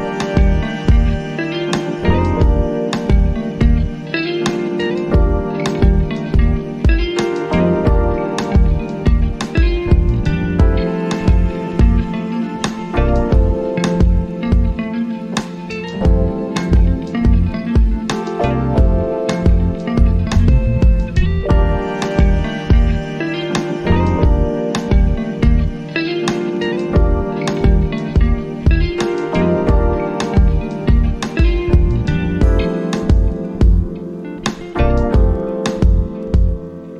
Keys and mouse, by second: 8.7 click, 22.4 right click.